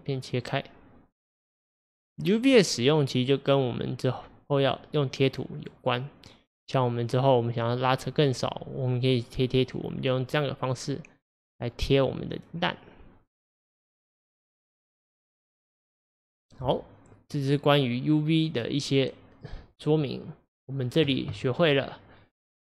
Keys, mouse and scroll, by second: 4.7-13.9 middle drag, 13.9-17.3 drag, 17.3-21.6 middle drag, 21.6 click.